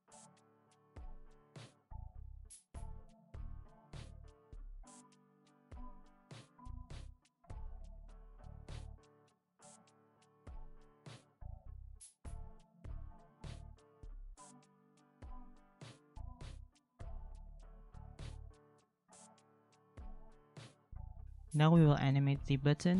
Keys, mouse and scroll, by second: 1.7 ctrl+z, 7.4 ctrl+c, 7.8 ctrl+v, 8.0 ctrl+z, 8.5 ctrl+c, 9.0 ctrl+v, 10.4 ctrl+c, 11.9 ctrl+v, 12.9 ctrl+c, 13.6 ctrl+v, 13.9 ctrl+x, 14.5 ctrl+v, 14.8 ctrl+z, 15.1 ctrl+v, 15.5 ctrl+z, 16.0 ctrl+c, 16.2 ctrl+v, 16.5 ctrl+c, 18.9 ctrl+v, 19.5 ctrl+x, 20.2 ctrl+v.